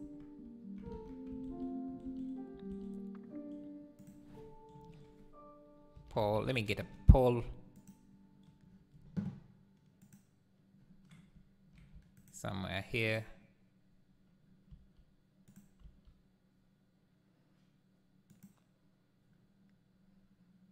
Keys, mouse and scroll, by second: 0.0 Tab, 0.9 alt+a, 1.5 ctrl+s, 6.8 click, 7.8-12.2 drag, 12.2-13.4 shift+right drag, 13.4-14.7 drag, 14.7 s.